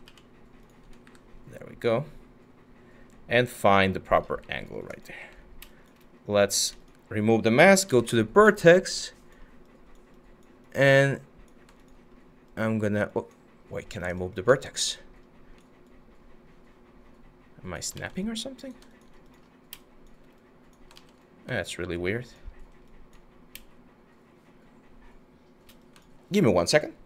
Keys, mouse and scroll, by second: 0.7 w, 4.8 q, 6.9-8.0 typing, 17.6 ctrl+z, 20.6-25.2 ctrl+z, 25.6 ctrl+shift+z.